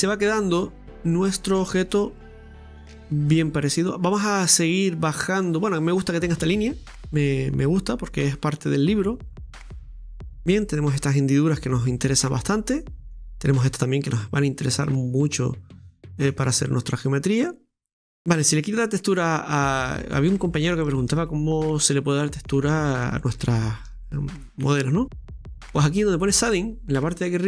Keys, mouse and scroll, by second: 6.2 scroll down 3, 6.5-9.6 middle drag, 9.9-16.4 middle drag, 16.4-18.1 scroll up 1, 18.1 middle click, 18.3-18.9 scroll up 1, 18.9-25.2 middle drag, 25.2 right click.